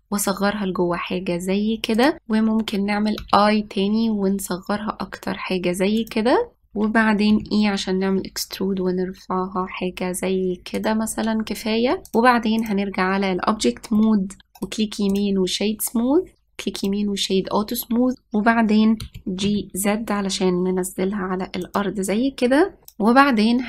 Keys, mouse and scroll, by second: 3.9 i, 6.6-8.0 scroll down 2, 8.0 e, 12.7-14.5 drag, 14.5 middle click, 15.2-19.5 right drag, 19.7 g, 22.9-23.5 shift+middle drag, 23.5 click.